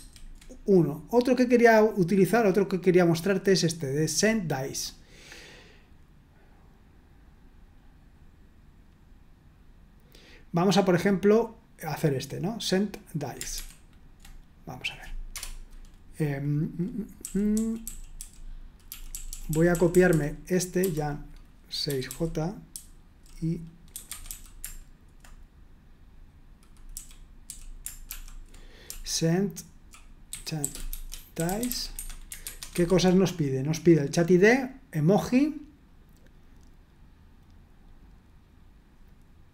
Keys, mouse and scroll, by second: 3.9 click, 13.6 super+1, 14.6 click, 15.4 Return, 17.2-20.8 typing, 21.8-22.7 typing, 23.9-24.2 typing, 26.9-31.9 typing, 31.9 Escape, 32.4 super+1, 32.7 super+2.